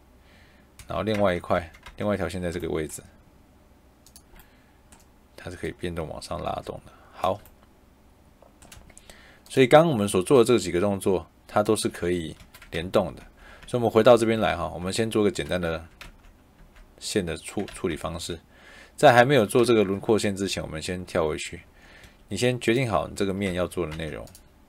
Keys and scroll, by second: 0.7 Escape, 1.0 Tab, 8.6 Escape, 11.8 Escape, 12.7 ctrl+z, 19.5 ctrl+z, 21.9 Escape, 23.4 Tab.